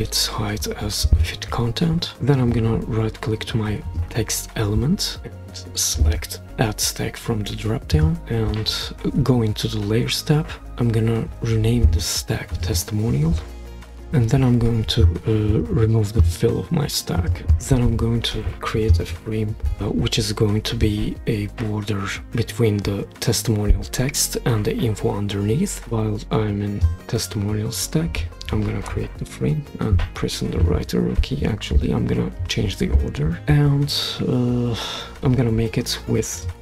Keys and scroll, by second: 13.3-13.7 typing.